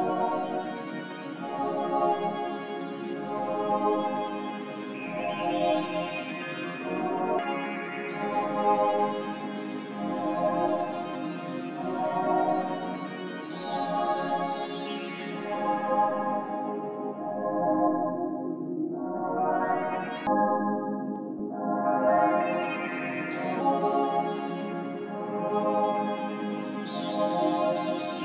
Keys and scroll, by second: 2.3 ctrl+Up, 2.3 p, 4.2 e, 7.1-7.8 typing, 7.9 ctrl+Up, 11.5 ctrl+Up, 13.8 ctrl+Up, 17.8 ctrl+Up, 18.7 p.